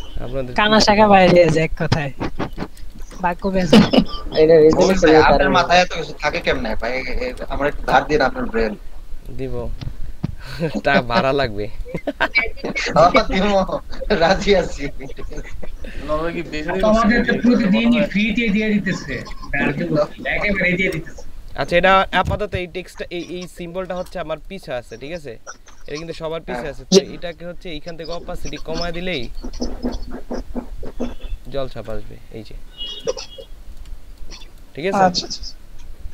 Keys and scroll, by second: 2.8-3.5 typing, 6.1 ctrl+space, 17.7 ctrl+shift+[, 19.2 ctrl+], 19.7 ctrl+], 20.1 ctrl+], 20.4 ctrl+], 22.9 ctrl+space, 33.4 ctrl+space.